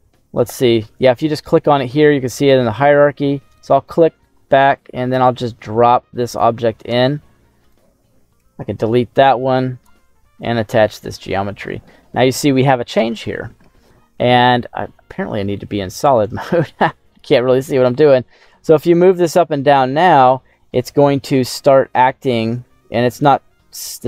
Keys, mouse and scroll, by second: 0.3 right click, 3.5 right click, 5.2 click, 7.5 right click, 8.3 Delete, 9.1 click, 10.3 click, 11.8 middle click, 13.0 middle click, 14.7-15.9 scroll down 3, 15.9 click, 15.9 scroll down 1, 16.6 middle click, 17.7 right click, 18.5 g, 18.6 g, 19.0 z, 22.9 right click, 23.6 middle click.